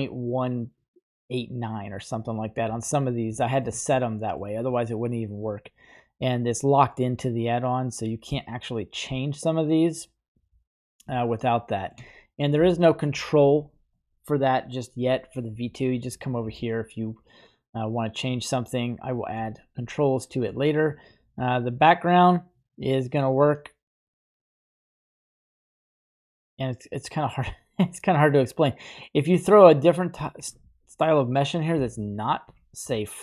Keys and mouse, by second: 3.4 shift+middle click, 4.0 middle click, 11.2-12.0 shift+middle drag, 12.1 middle click, 20.7-30.5 shift+drag, 30.9 right click, 32.0 right click, 32.5 typing.